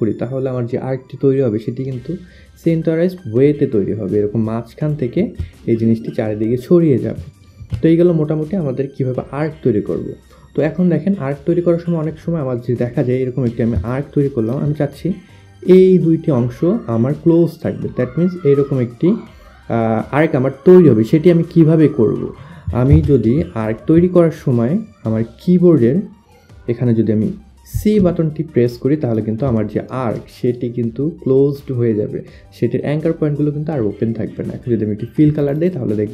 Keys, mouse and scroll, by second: 13.5 shift+click, 22.5 ctrl+z, 23.2 shift+click, 27.3 shift+click, 34.9 click.